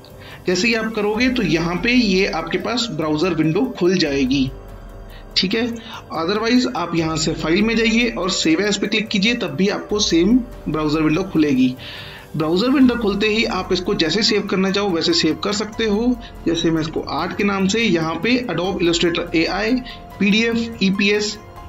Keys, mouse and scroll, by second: 5.6 click, 12.6 scroll up 1, 13.4 click, 16.2-17.2 typing, 18.1 click.